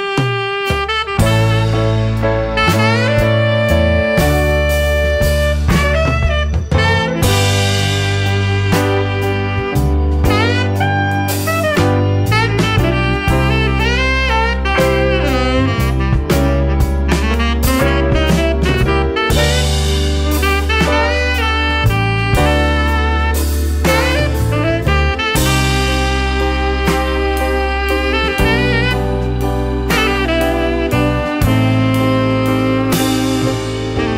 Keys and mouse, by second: 5.1-8.6 drag, 8.6 BackSpace, 8.7 click, 8.8 BackSpace, 8.9 BackSpace, 9.3-14.1 drag, 14.1 KP_9, 16.1-16.9 drag, 19.0 click, 20.9-22.1 middle drag, 22.8 middle click, 25.5 click, 29.4 click, 31.2 click.